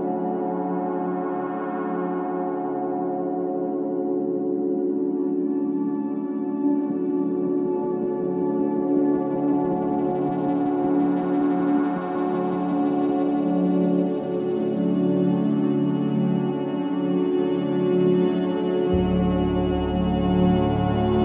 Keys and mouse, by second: 0.5 click, 2.1 g, 6.6 click, 7.8 click, 8.5 g, 9.9 click, 12.1 click, 12.9 g, 15.5 click, 16.3 g, 18.1 g, 20.6 click.